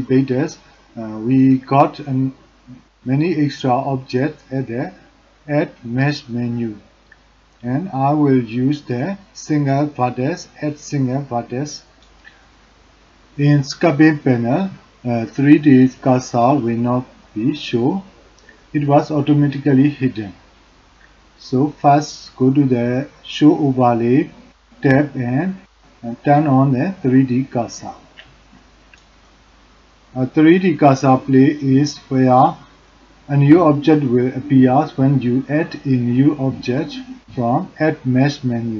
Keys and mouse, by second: 6.9-10.0 drag, 16.3-21.9 drag, 24.2-31.3 drag.